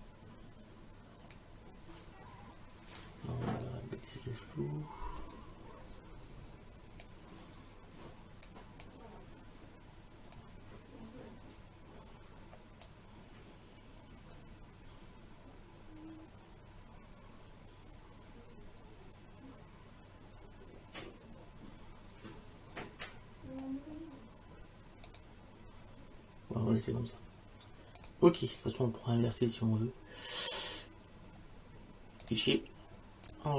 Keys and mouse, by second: 3.0 click, 5.2 click, 7.1 click, 8.8 click, 12.9 click, 25.1 click, 28.0 click, 32.2 click.